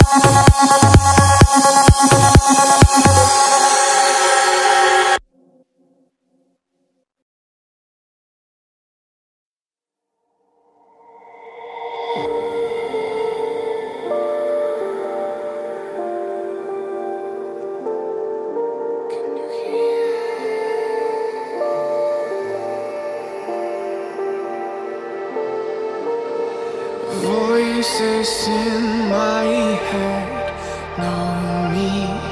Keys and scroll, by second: 1.3 ], 1.5 ], 1.8 ], 4.0 ], 5.4 [, 7.6 ctrl+z, 10.0 ctrl+z, 19.5 ctrl+z.